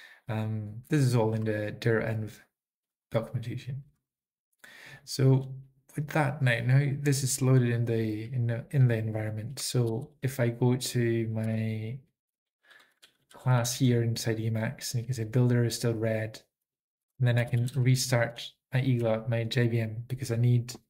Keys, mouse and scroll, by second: 1.3 Down, 1.3 Up, 3.9 Up, 4.1 Up, 4.9-5.7 typing, 7.4-8.5 typing, 11.5 Return, 13.1 ctrl+p, 13.1-13.4 alt+f, 13.1-13.9 typing, 17.1 Left, 17.1 alt+x, 19.0 Return, 19.0 typing, 20.7 ctrl+d, 20.7 ctrl+a, 20.7 ctrl+s, 20.7 ctrl+n, 20.7 Up, 20.7 alt+f, 20.7 alt+b, 20.7 Down, 20.7 Right, 20.7 ctrl+p, 20.7 Left.